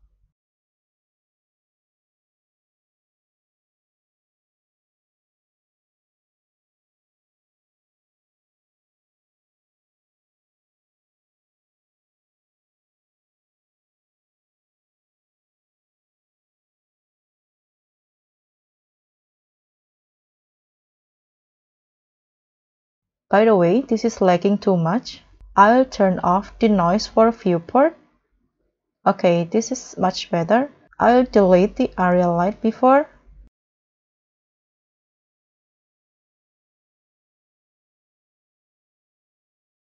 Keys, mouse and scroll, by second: 0.3 s, 2.2-2.6 scroll down 4, 2.6 scroll up 1, 5.8 s, 9.9 KP_7, 10.6-11.1 scroll down 2, 11.3 scroll up 1, 14.2 middle click, 15.0-15.8 scroll up 6, 16.5 w, 16.6 g, 19.8 scroll, 19.8 Escape, 20.0-20.5 scroll down 4, 20.5 scroll up 1, 28.2 scroll up 2, 28.4 middle click, 29.1 scroll up 2, 29.6 scroll down 2, 32.3 Delete, 34.3 scroll up 2, 35.8 scroll down 1, 36.1 middle click, 36.3-36.7 scroll down 4, 36.8 scroll up 3, 37.3 middle click, 37.8 scroll up 1.